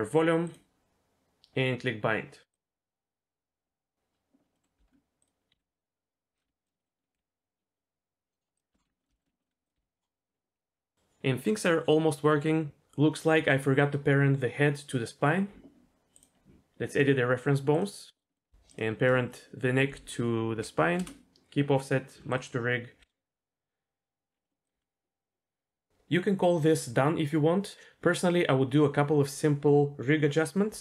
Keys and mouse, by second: 0.4 click, 2.5-3.8 drag, 4.5 middle click, 4.8 Tab, 5.2 click, 5.5 g, 6.4 r, 6.8 middle click, 7.1 g, 8.8 alt+g, 9.0 middle click, 9.1 shift+middle click, 9.4 middle click, 9.7 g, 16.1 click, 18.2 click, 18.3 middle click, 18.7 shift+click, 20.5 ctrl+p, 24.1 click, 24.4 middle drag, 24.6 click, 24.7 g.